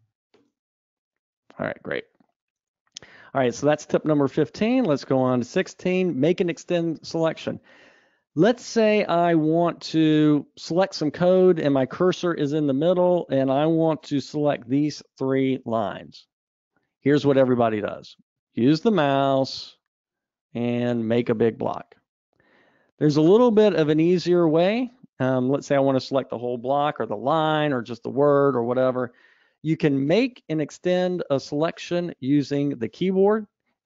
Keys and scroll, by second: 0.7 alt+super+Return, 2.1 super+z, 3.5 super+Up.